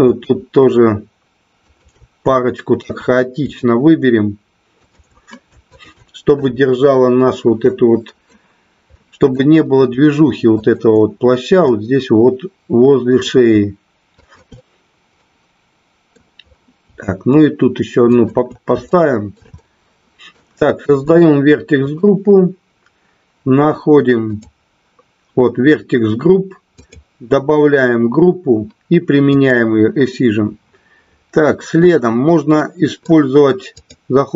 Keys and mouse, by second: 0.0 shift+click, 2.3 shift+middle click, 4.7 shift+click, 5.7 shift+click, 7.7 middle click, 8.9 middle click, 11.6-13.3 middle drag, 14.2 shift+click, 15.0-16.1 middle drag, 18.2 shift+click, 18.8 shift+middle click, 19.4 middle click, 26.8 click, 29.2 click, 32.6 middle click, 33.7-34.3 drag.